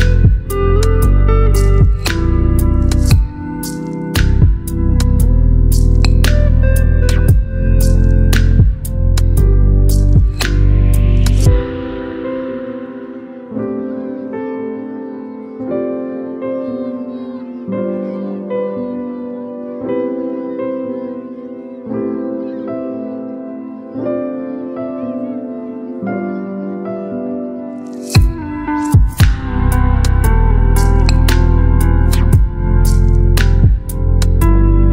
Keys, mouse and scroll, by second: 1.3 ctrl+j, 4.0 ctrl+j, 7.4 right click, 8.5 click, 12.9-15.6 scroll up 1, 15.9 click, 20.9 right click, 22.1 click, 23.2 right click, 24.9 click, 26.9 ctrl+j, 29.3-30.0 drag.